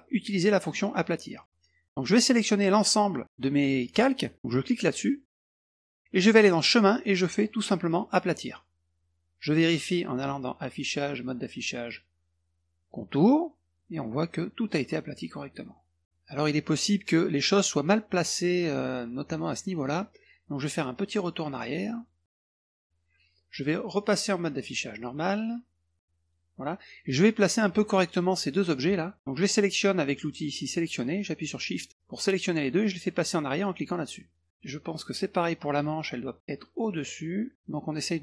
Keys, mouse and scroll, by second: 0.5 click, 1.3 click, 5.4 click, 6.6 click, 8.5 click, 10.2 click, 12.8 click, 13.8 middle click, 14.1 middle click, 14.4 middle click, 15.0 click, 15.5 middle drag, 16.0 middle click, 16.3 middle click, 22.0 click, 24.0 click, 26.2 click, 27.2 middle click, 27.6 middle click, 28.5 click, 31.7 shift+click, 34.0 click, 34.3 click, 34.5 middle click, 34.9 middle click, 35.7 click, 36.9 click, 37.8 middle click.